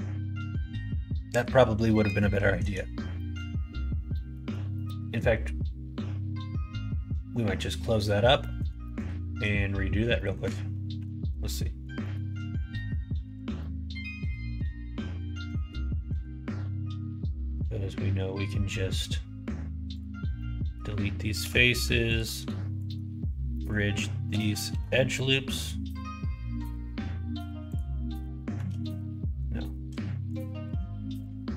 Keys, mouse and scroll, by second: 1.8 middle click, 2.2 shift+middle click, 3.1 middle click, 4.1 middle click, 4.7 shift+middle click, 8.3 middle click, 8.8 shift+middle click, 10.1 shift+middle click, 10.9 3, 12.0 click, 12.7 middle click, 13.5 middle click, 15.5 alt+shift+click, 16.0 x, 20.3 middle click, 21.4 2, 22.0 alt+click, 22.7 alt+shift+click, 23.5 middle click, 24.6 ctrl+e, 28.6 ctrl+z, 30.3 alt+click.